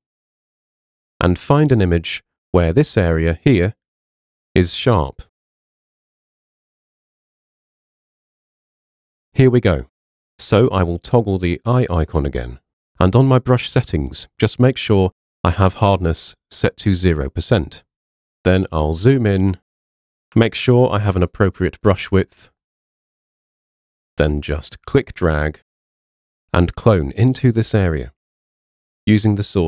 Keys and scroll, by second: 20.4 ].